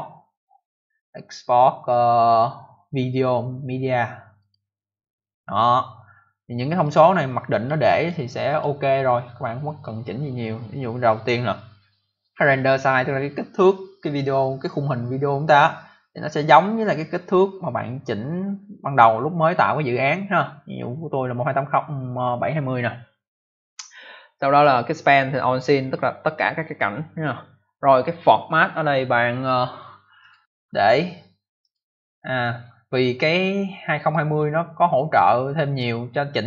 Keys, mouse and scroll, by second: 4.3 click, 6.7 click, 8.0 click, 30.1 click, 31.5 click, 34.0 click.